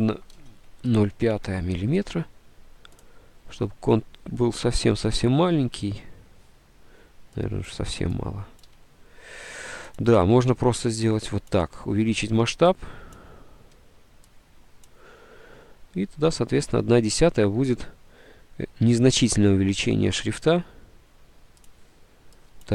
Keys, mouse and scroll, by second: 0.6 shift+Right, 1.2 KP_0, 1.4 KP_5, 2.3 shift+Right, 8.7 1, 9.6 Escape.